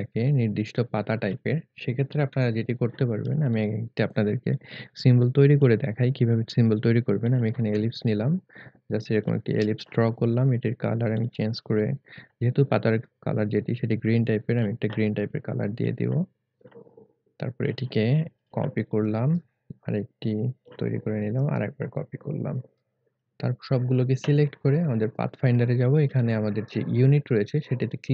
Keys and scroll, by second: 2.3 Delete, 27.4 1.